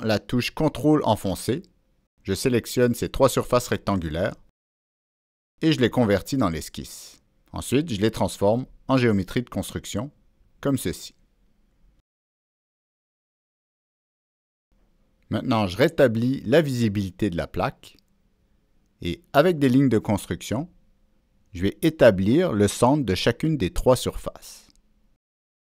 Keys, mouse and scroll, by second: 0.0 ctrl+click, 1.4 ctrl+click, 4.0 ctrl+click, 6.1 ctrl+a, 8.4 ctrl+a, 8.4 click, 8.5 ctrl+a, 10.2 click, 11.8 middle click, 11.8 click, 16.3 click, 17.4 click, 19.6 ctrl+8, 19.6 click, 20.2 Escape, 20.6 click, 22.4 Escape, 23.1 click.